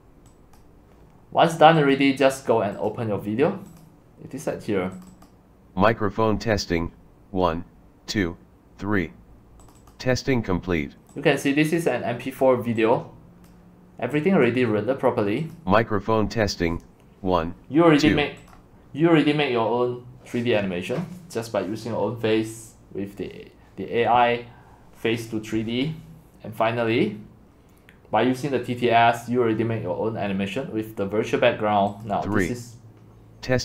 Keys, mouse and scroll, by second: 0.3 click, 0.6-1.8 drag, 2.4 click, 3.6 click, 5.5 click, 9.8-11.1 drag, 11.6 click, 12.8-13.9 drag, 14.6 click, 16.7 click, 21.2-22.4 scroll down 2, 23.0-23.8 scroll down 2, 24.2 scroll down 1.